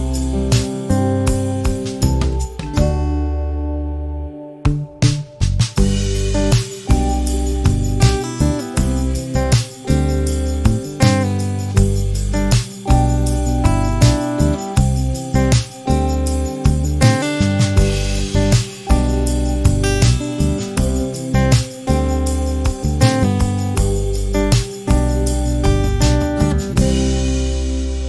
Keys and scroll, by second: 7.6 space, 8.5 m, 14.1 space, 15.4 m, 21.2 space, 22.9 p, 26.9 space.